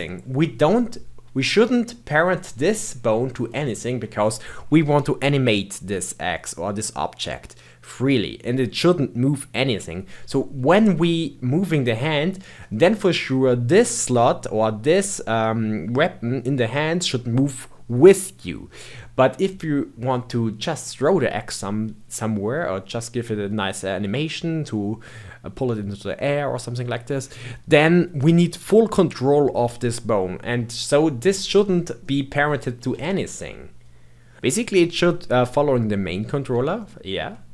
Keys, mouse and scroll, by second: 1.3-3.3 middle drag, 3.3-3.6 scroll down 2, 3.6-6.8 shift+middle drag, 11.1-15.8 middle drag, 32.0-34.3 middle drag, 36.8-37.5 shift+middle drag.